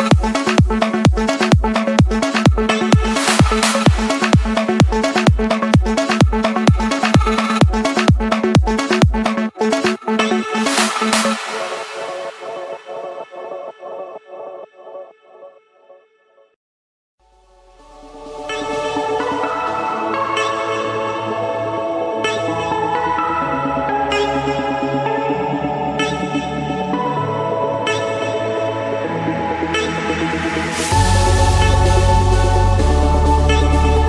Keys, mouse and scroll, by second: 1.1 click, 4.6 click, 5.6-6.2 typing, 6.8 Return, 7.8 typing, 9.1-10.2 drag, 11.7-13.2 typing, 13.9 Escape, 15.7-17.1 drag, 17.1-17.8 scroll down 3, 17.8 Escape, 18.7-19.1 typing, 19.6 Return, 20.6 click, 20.9 Return, 21.7 click, 21.8 Return, 24.6 click, 26.0-27.0 scroll, 29.0 click, 29.2-30.1 scroll, 30.8 click, 31.1-32.7 scroll.